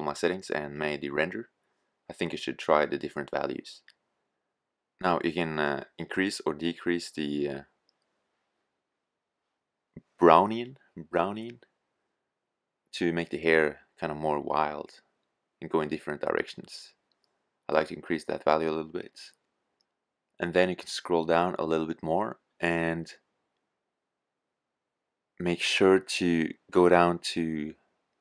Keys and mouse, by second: 5.9-7.7 drag.